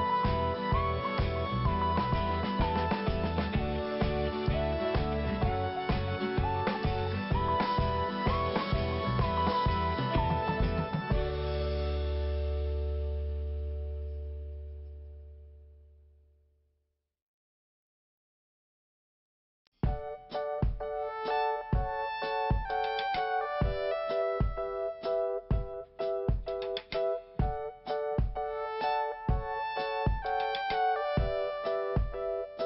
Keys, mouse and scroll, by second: 3.8 click, 10.6 scroll down 1, 11.7 click, 11.8 click, 12.4 click, 12.5 click, 13.0 click, 13.1 click, 14.1 click, 19.6 5, 21.8 scroll up 1, 21.8 click, 22.0 click, 23.2 click, 23.3 click, 23.8 click, 25.6 click, 26.8 click, 27.0 click, 28.3 click, 28.5 click, 30.9-31.5 scroll down 1.